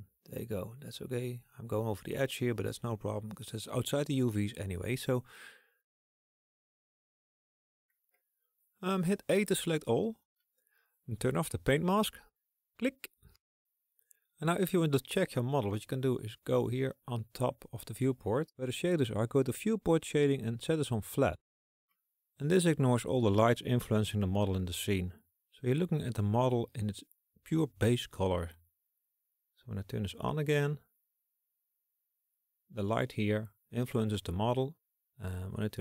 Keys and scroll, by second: 8.4 a.